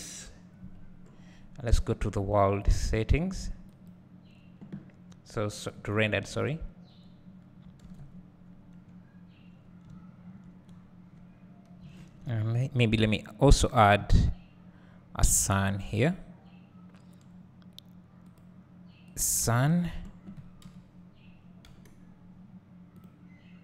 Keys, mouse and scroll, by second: 0.8-1.7 scroll down 2, 1.7-4.1 scroll down 1, 4.1 click, 5.1-5.8 scroll up 2, 5.8-7.1 scroll down 2, 7.1 scroll down 1, 7.3-8.2 scroll up 2, 8.2-8.5 scroll up 1, 8.5-9.0 scroll down 2, 9.0-9.6 scroll up 2, 9.6-9.9 scroll down 2, 10.7 scroll down 1, 11.2 scroll up 1, 13.5 click, 19.6-20.7 scroll down 2, 20.7 KP_1, 21.7 g, 23.0 click.